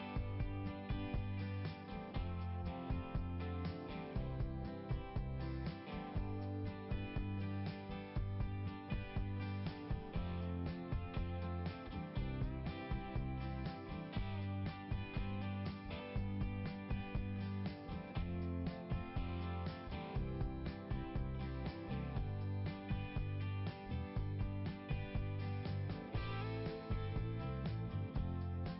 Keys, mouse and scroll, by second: 1.8 scroll up 1, 6.6 click, 6.7 click, 7.0 click, 7.1 double click, 8.7 click, 11.2 click, 11.3 click, 15.8 click, 16.7 click, 18.9 scroll up 1, 20.4 scroll down 1, 21.1 click, 25.2 click, 25.4 click.